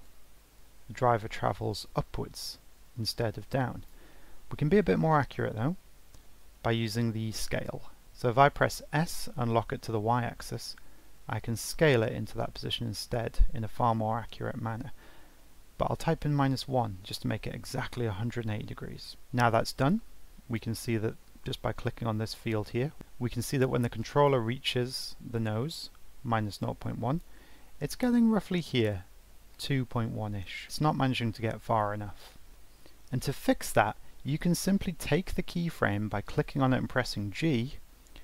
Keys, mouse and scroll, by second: 4.9 ctrl+z, 5.5 ctrl+z, 6.0 ctrl+z, 6.4 ctrl+z, 19.1-20.3 drag, 23.0-25.7 drag.